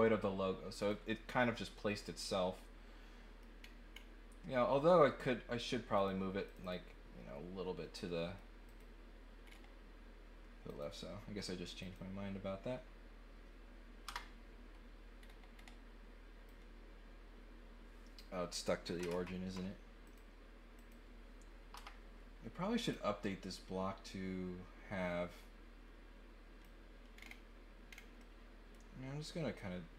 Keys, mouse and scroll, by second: 0.8 click, 1.9 click, 2.5-3.4 scroll up 2, 3.5-3.9 scroll down 3, 5.9 click, 6.4 click, 8.0-8.3 scroll up 1, 8.6 click, 9.4 scroll up 2, 10.6 click, 11.8 click, 15.1-15.7 scroll up 6, 16.4-18.1 drag, 20.0 click, 20.7 click, 22.9-26.6 drag, 27.1 scroll down 2, 27.9 scroll down 2, 28.1 middle click, 29.2 middle click.